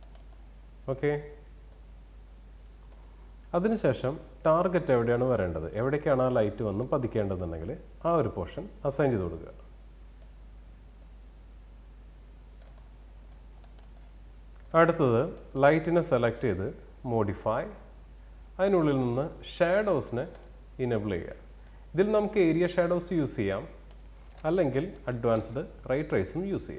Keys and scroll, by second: 22.9 alt+w.